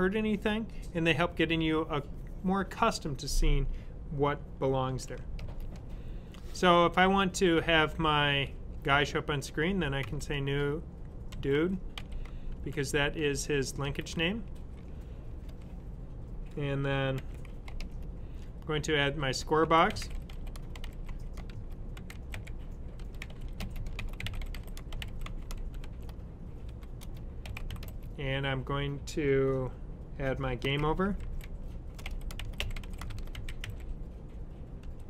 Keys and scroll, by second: 4.5-5.7 typing, 9.9 typing, 20.7-27.9 typing, 30.3-35.0 typing.